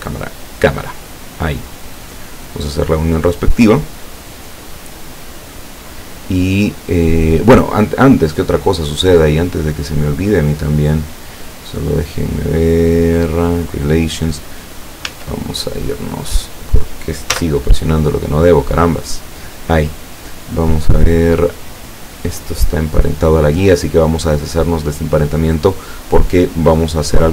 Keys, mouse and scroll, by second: 0.5 click, 1.8-2.3 drag, 2.9-3.9 drag, 4.6-5.7 drag, 10.6 click, 11.9 click, 13.6 click, 15.1 Tab, 17.4 z, 17.9 right click, 18.4 right click, 19.0 right click, 21.8 right click, 24.6 click.